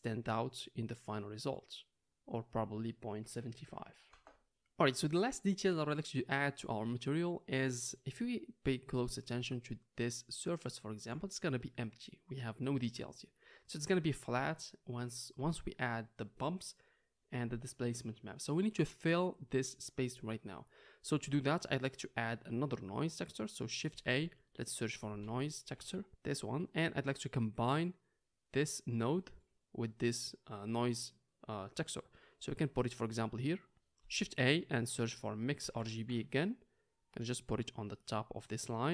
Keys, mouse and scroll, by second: 0.4 click, 0.5-7.7 drag, 8.3 middle click, 8.8 click, 9.4-18.4 ctrl+drag, 18.9 click, 19.0-20.3 middle drag, 20.3-23.0 drag, 23.3 click, 23.7-27.5 shift+middle drag, 24.0 shift+a, 27.5-38.0 drag, 34.2 shift+a, 38.0-38.9 middle drag.